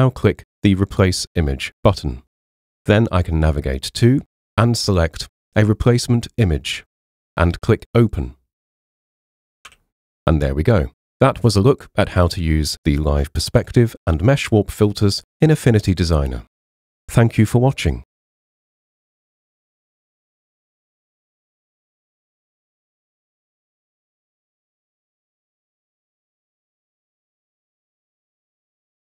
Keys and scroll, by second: 9.7 h.